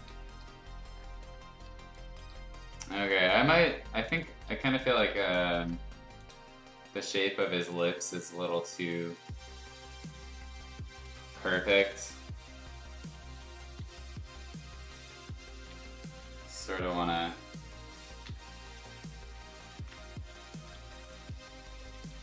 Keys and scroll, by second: 0.4 b, 1.8 space, 4.5 b, 12.4 ], 12.6 ], 14.5 ], 15.0 [, 15.2 [, 15.5 [, 18.2 ctrl+z, 19.7 ctrl+z, 20.7-22.2 typing.